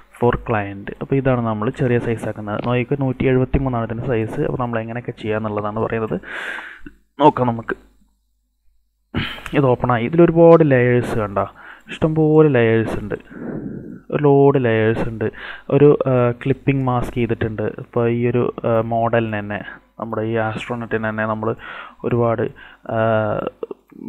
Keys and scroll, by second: 0.0-0.2 typing, 5.3 space.